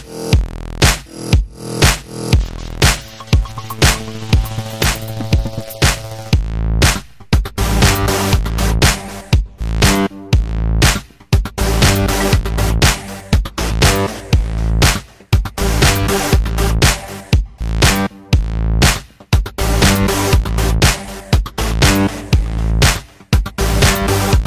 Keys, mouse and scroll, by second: 0.0-1.8 typing, 0.0 click, 0.4 alt+right click, 0.5 alt+click, 1.0 click, 1.4 alt+click, 1.6 alt+click, 1.7 alt+middle click, 2.8-4.7 ctrl+drag, 4.7-6.1 typing, 5.5 click, 5.7 ctrl+z, 5.8 ctrl+z, 6.2 click, 7.2 f, 7.4-13.7 drag, 13.7 alt+middle click, 13.8 alt+click, 14.0 alt+middle click, 14.1 alt+click, 14.4 alt+middle click, 14.5 alt+click, 14.8 alt+middle click, 14.9 alt+click, 15.1 alt+middle click, 15.2 shift+c, 15.3 f, 15.5 ctrl+click, 16.2 ctrl+z, 16.3 ctrl+z, 16.4 ctrl+click, 17.4 q, 17.4 click, 17.6 q, 17.7 click, 17.8 q, 18.0 alt+middle click, 18.1 alt+right click, 18.4 g, 18.7-19.9 drag, 19.9 alt+middle click, 20.1-21.9 typing, 20.3 click, 20.8 click, 21.1 click, 21.5 click, 21.7 alt+middle click, 22.0 click, 23.0 f, 23.1 click, 23.4 ctrl+z, 23.5 f, 23.6 shift+click, 24.1 ctrl+z, 24.2 alt+middle click.